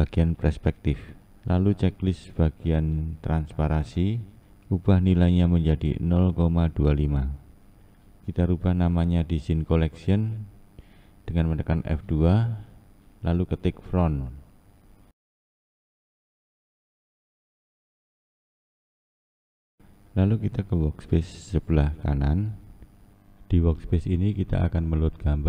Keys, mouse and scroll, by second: 7.7 click, 10.4 F2.